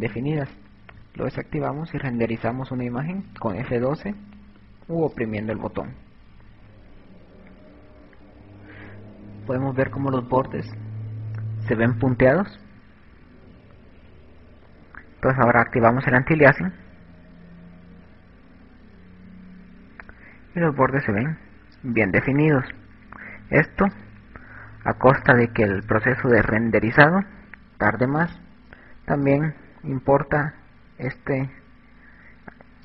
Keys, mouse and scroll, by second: 0.6 click, 3.3 click, 13.5 Escape, 15.7 click, 16.8 click, 23.9 Escape.